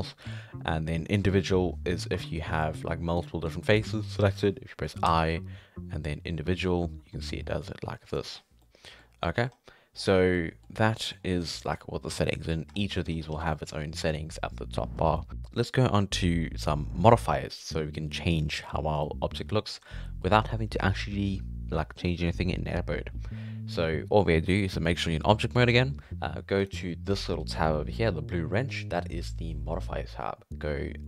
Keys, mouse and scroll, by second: 2.5 scroll down 1, 2.6 middle click, 3.2 shift+right click, 3.5 shift+right click, 3.7 shift+right click, 5.1 i, 8.3 scroll up 5, 8.6 middle click, 9.1 scroll down 2, 9.2 middle click, 9.5-9.9 scroll up 5, 9.9-10.3 scroll down 1, 10.3 middle click, 10.6-11.0 scroll up 5, 11.0 middle click, 11.2 scroll down 2, 11.4 middle click, 11.7-12.4 scroll up 3, 12.7 scroll down 1, 12.8 middle click, 13.1 scroll up 1, 13.3 alt+a, 13.5-15.0 middle drag, 15.0 scroll down 4, 15.2 middle click, 15.3-16.0 scroll up 1, 19.0-19.5 scroll up 2, 19.5 middle click, 19.7-20.1 scroll down 4, 20.1 middle drag, 20.3-21.0 scroll up 4, 22.1-25.1 middle drag, 26.6 click.